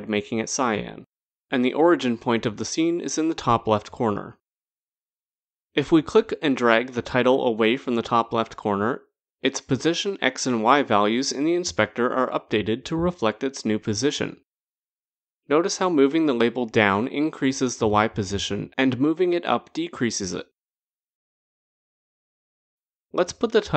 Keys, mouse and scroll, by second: 4.8 click, 8.1 click, 8.6 click, 22.4 click.